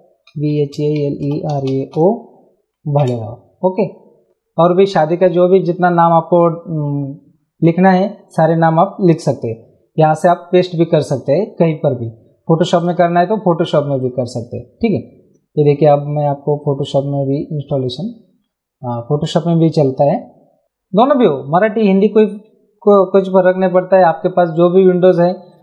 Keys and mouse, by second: 0.0-2.4 typing, 10.0 click, 12.8 right click, 14.0 click, 15.5 click, 16.7 click, 23.0 ctrl+n, 24.3 click, 25.5 click.